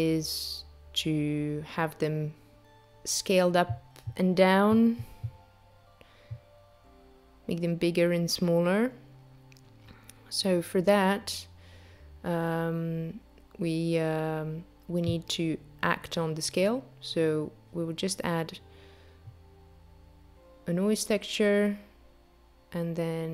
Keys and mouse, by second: 0.3 click, 1.4 click, 2.7 click, 4.7 click, 8.6 click, 10.1 click, 11.5 ctrl+a, 19.2 click, 19.9 click, 22.3 click.